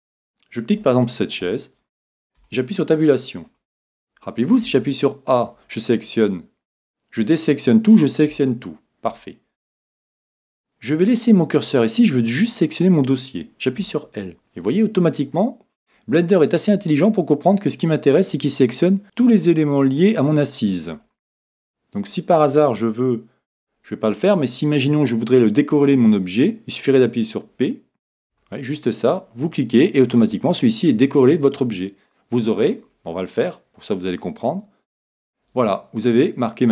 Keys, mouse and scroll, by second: 1.0-2.6 middle drag, 2.4 Tab, 3.1-5.0 middle drag, 4.6 a, 8.3 a, 9.0 a, 13.8 l, 14.6-16.5 middle drag, 21.0-22.8 middle drag.